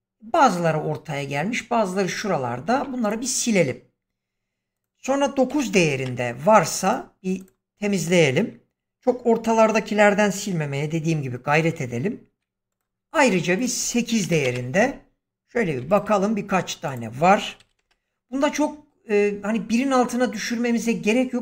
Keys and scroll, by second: 2.6 x, 5.4 9, 5.6 Return, 12.2 x, 14.1 8, 14.3 Return, 15.7 x, 17.5 7, 17.7 Return.